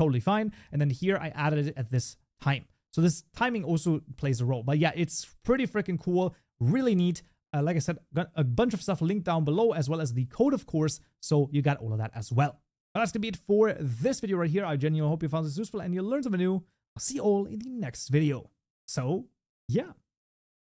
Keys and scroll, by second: 5.7 shift+Escape, 10.9 ctrl+s.